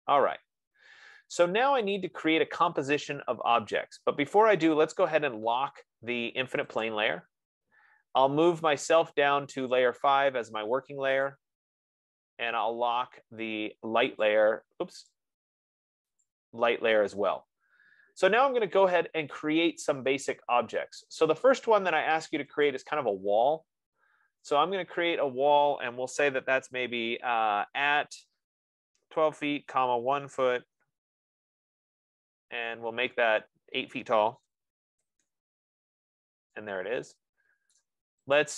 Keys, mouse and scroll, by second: 0.7-1.3 scroll, 1.4-2.0 scroll, 2.0-2.3 scroll, 5.5 scroll, 7.2 click, 10.1 click, 11.6 click, 14.6 click, 15.4 click, 16.5 click, 21.6 F15, 23.2 click, 24.9 click, 27.3 @, 28.8-31.2 typing, 31.7 Return, 34.9-35.6 typing, 35.7 Return, 38.1 right click.